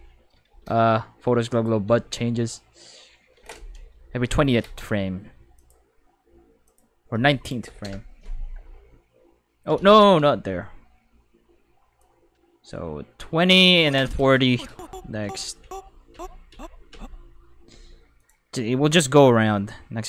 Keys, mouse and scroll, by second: 0.4 shift+5, 1.5 click, 1.8 space, 3.3 space, 5.6 click, 6.6 click, 7.6 9, 7.8 Return, 9.8 ctrl+z, 9.9 ctrl+5, 12.0-14.1 drag, 18.1 click, 19.0-20.0 drag.